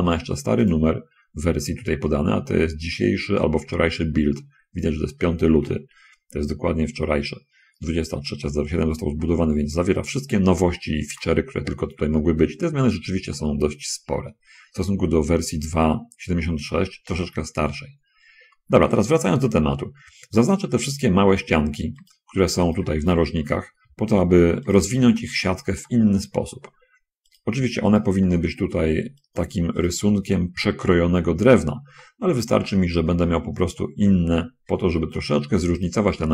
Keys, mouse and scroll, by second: 0.5 click, 9.5 Escape, 10.3 scroll up 1, 10.9 shift+middle click, 11.8 shift+middle click, 12.5 middle click, 13.7-15.0 middle drag, 19.2 shift+middle click, 20.7 middle click, 22.3 shift+middle click, 23.0 space, 23.8 shift+scroll up 1, 24.9 shift+middle click, 25.4 shift+middle click, 26.2 middle click, 28.2 shift+right click, 28.5 shift+middle click, 29.4 shift+right click, 30.1 shift+right click, 31.7-32.0 scroll down 2, 32.0-33.8 middle drag, 34.0 shift+click, 34.5 shift+middle click, 36.1 shift+right click.